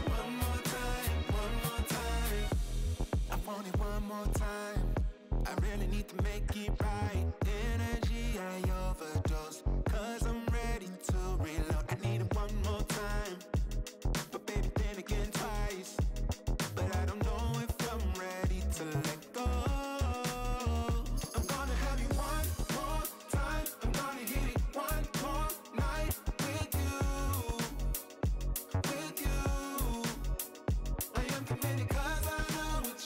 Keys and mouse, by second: 0.1 click, 0.3 click, 0.4 click, 0.6 space, 0.8 click, 1.0 click, 1.5 click, 1.6 click, 2.5 ctrl+z, 3.0 click, 3.3 x, 3.4 space, 3.6 click, 3.8 click, 4.1 click, 4.3 click, 5.7 space, 6.0 click, 6.6 click, 7.1 click, 7.2 click, 7.4 click, 7.5 space, 8.1 click, 8.6 click, 8.7 click, 8.9 space, 8.9 click, 9.4 click, 9.5 click, 11.9 click, 12.0 click, 12.3 click, 12.6 space, 12.7 click, 13.1 click, 13.2 click, 13.6 click, 13.8 click, 14.0 click, 14.8 space, 14.9 click, 15.1 click, 15.3 click, 15.5 click, 15.6 click, 15.8 click, 16.0 click, 16.2 space, 16.5 click, 16.7 click, 17.1 click, 17.4 click, 17.6 click, 17.6 space, 17.7 click, 18.0 click, 18.2 click, 18.4 space, 18.5 click, 18.6 click, 19.1 click, 19.4 space, 19.4 click, 19.7 click, 20.0 click, 20.3 click, 20.8 space, 21.7 ctrl+z, 22.0 click, 22.2 click, 22.3 click, 22.4 space, 22.6 click, 23.0 space, 23.3 click, 24.6 click, 24.9 space, 27.0 click, 27.1 click, 29.0 click, 29.9 click, 30.3 click, 30.7 click, 30.9 click, 31.5 click, 32.3 click.